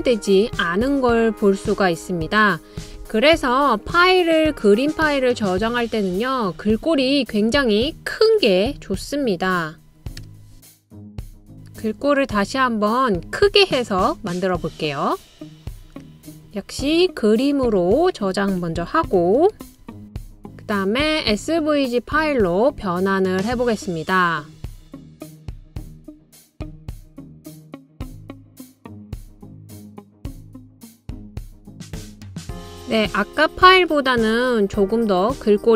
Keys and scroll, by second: 3.9-4.7 typing, 8.7-9.7 typing, 19.8-20.5 typing, 27.9-28.8 typing, 32.6-33.4 typing.